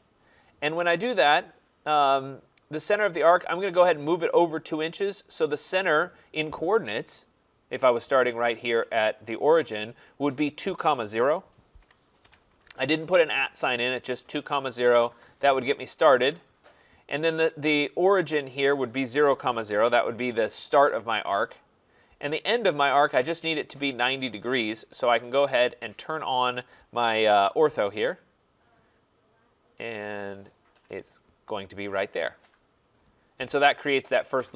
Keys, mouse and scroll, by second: 0.0-5.1 drag, 11.2-12.2 typing, 14.9 Return, 16.9-19.6 middle drag, 16.9 scroll, 19.2-20.4 typing, 20.8 Return, 27.4 click, 32.5 click.